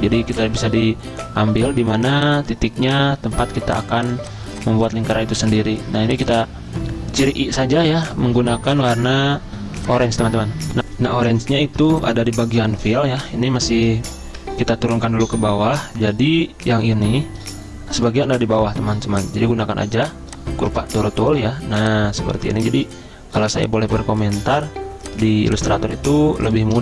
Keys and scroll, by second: 1.4 ctrl+z, 10.7 F10, 10.8 ctrl+z, 14.8 ctrl+[.